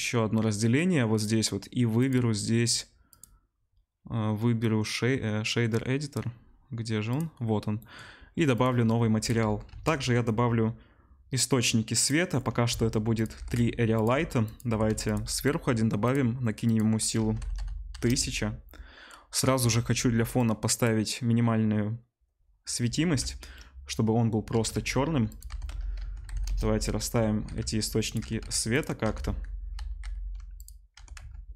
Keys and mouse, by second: 9.6 shift+a, 12.8 s, 13.2-16.0 middle drag, 13.3 g, 14.1 s, 14.6 g, 16.0 click, 16.1 middle click, 16.7-19.7 drag, 17.5 0, 19.7-20.3 middle drag, 20.3-25.3 drag, 24.6 shift+d, 25.3-31.5 middle drag, 25.4 r, 27.4 g, 28.3 g, 29.1 r, 30.9 r.